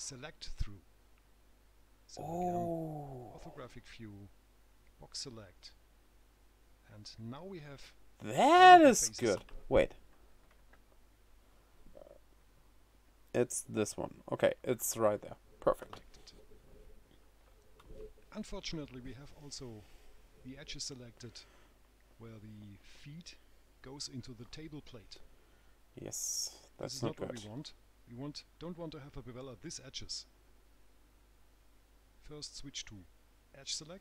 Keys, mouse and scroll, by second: 3.1 click, 4.9 click, 7.0 right click, 15.2 right click, 18.7 right click, 19.8 scroll up 2, 20.2 middle click, 33.8 click.